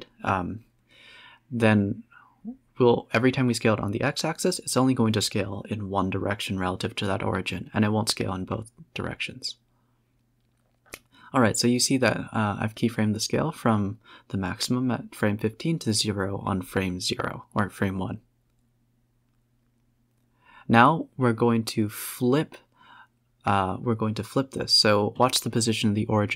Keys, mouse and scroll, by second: 1.2-2.7 drag, 4.3-6.5 drag, 6.9 s, 10.6 space, 11.9 click, 12.3-12.8 drag, 12.8 space, 13.8 click, 22.4 Right, 23.1 KP_7, 24.4 z.